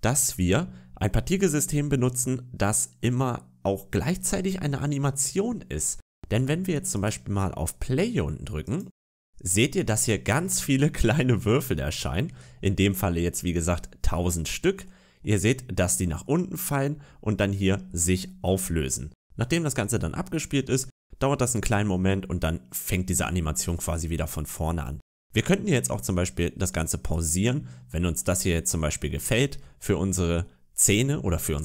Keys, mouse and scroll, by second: 0.0 scroll up 2, 6.8 click, 8.5 click, 10.0 scroll up 1, 10.3 middle click, 11.4-12.0 scroll down 3, 14.7 middle click, 15.2 scroll down 2, 16.1 middle click, 17.7-18.2 scroll up 7, 18.6 scroll down 2, 27.0 click, 27.6-28.0 scroll up 4, 28.0 middle click, 29.1-29.7 scroll down 3, 29.5 middle click.